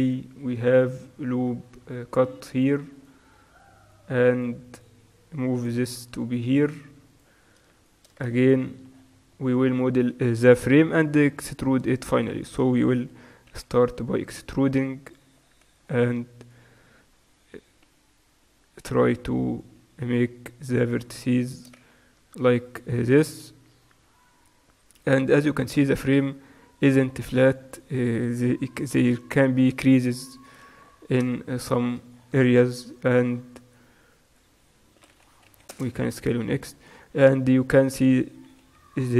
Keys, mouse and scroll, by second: 0.2 ctrl+r, 3.1-9.1 right drag, 3.7-5.6 drag, 6.6 g, 9.1 click, 9.9-14.2 middle drag, 13.6 e, 15.5-16.5 middle drag, 16.5-19.1 drag, 17.9 g, 19.6-23.8 right drag, 20.1 g, 22.4-23.8 middle drag, 23.8 e, 27.8-29.8 right drag, 28.9 g, 30.4-31.5 right drag, 31.4-34.4 middle drag, 32.7 e, 35.0 s, 36.6 middle click.